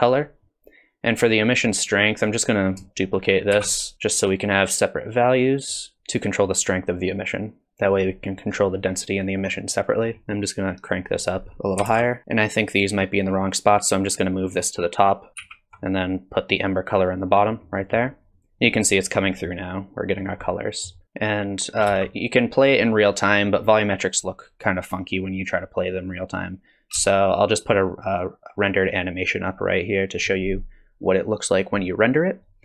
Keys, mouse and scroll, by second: 0.5 click, 2.2 click, 3.5 shift+d, 4.1 click, 6.0 middle click, 7.2 click, 10.0-10.4 scroll up 2, 10.4 click, 11.2 click, 12.2 ctrl+c, 13.5 click, 15.4 ctrl+v, 17.3-17.7 scroll up 1, 17.7 middle click, 18.4 middle click, 19.3 middle click, 20.7 middle click, 22.1 space.